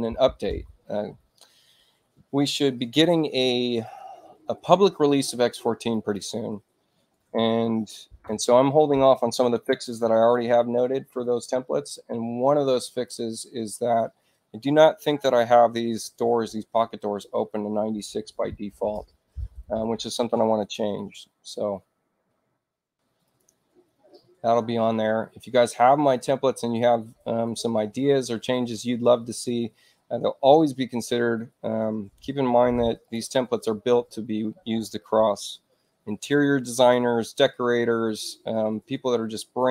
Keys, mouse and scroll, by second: 5.8 click, 7.2 6, 8.2 Return, 12.8 click, 13.9 e, 16.9 click, 18.1 9, 18.9 Return, 22.1 click, 23.2 click, 32.5 space, 32.9 click, 39.5 click.